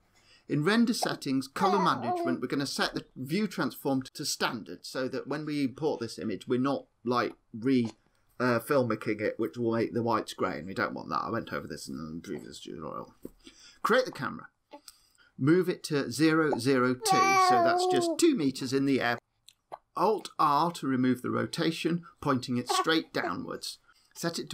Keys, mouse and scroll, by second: 2.5 click, 3.6-4.6 scroll down 24, 4.6 click, 4.6-5.2 scroll down 1, 5.2-6.6 scroll down 3, 6.6-7.3 scroll down 1, 7.9 click, 12.7 shift+a, 14.2 shift+a, 15.4 click, 21.5 alt+r, 24.2 click.